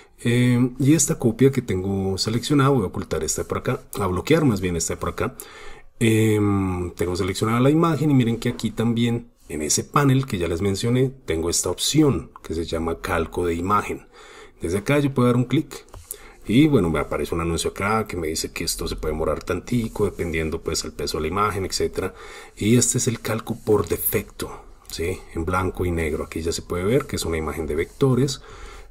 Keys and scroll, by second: 24.0 super+space, 24.8 super+space, 28.4 super+space.